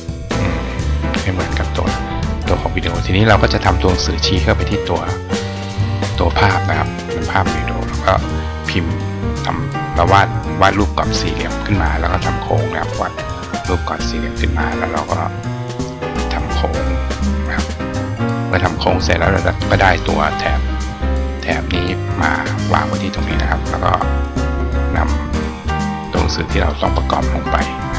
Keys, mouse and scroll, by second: 0.6 click, 0.9 click, 8.2 click, 8.8 click, 11.9 click, 12.6 click, 14.8 click, 15.4 click, 16.8-17.5 drag, 19.2 click, 20.0 click, 20.4-23.0 drag, 24.0-26.5 drag.